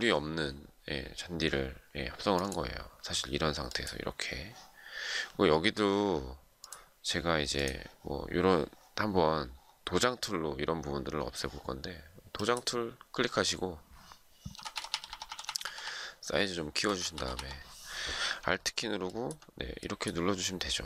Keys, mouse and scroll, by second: 14.2-17.6 typing, 18.7 alt+click.